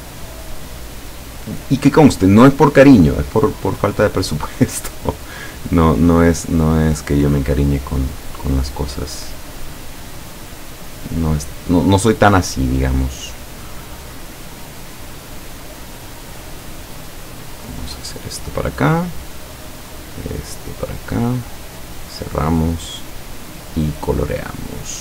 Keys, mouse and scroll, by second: 10.2 click, 17.1 click, 18.3 click, 19.6-20.2 drag, 21.1 click, 21.9 click, 23.0 click, 23.6 click.